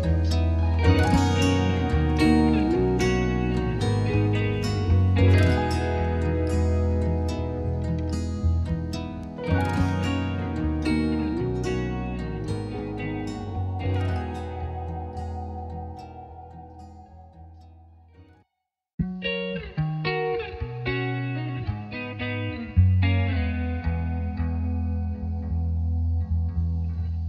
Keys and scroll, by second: 8.4-9.4 typing, 9.6 Return.